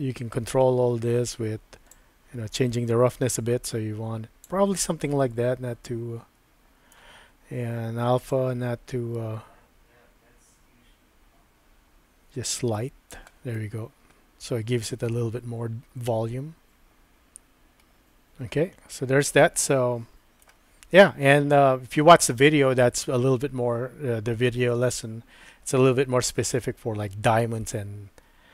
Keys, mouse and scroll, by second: 2.0-4.5 drag, 4.8-6.9 middle drag, 8.4-13.1 drag, 13.6-20.6 middle drag.